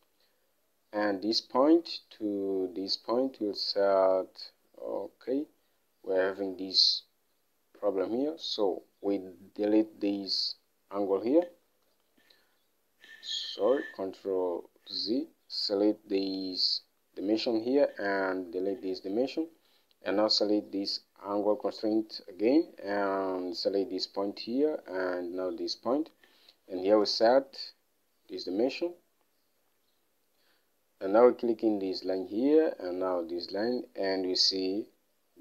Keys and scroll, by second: 8.2 Escape, 12.2 Delete, 13.8 ctrl+z, 18.8 Delete, 26.9-27.8 typing.